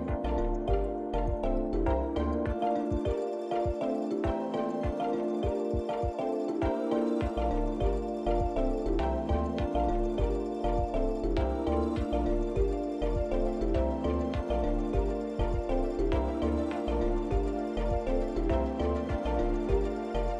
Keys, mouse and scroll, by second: 4.1 click, 5.0 click, 5.9 click, 6.5 l, 10.2 click, 11.2 click, 12.1 Tab, 12.4-12.8 scroll down 5, 13.2-13.5 scroll down 2, 14.0 scroll down 4, 15.6 shift+middle click, 16.6-16.9 scroll down 2, 17.3 shift+middle click, 18.9 middle click, 20.2 shift+middle click.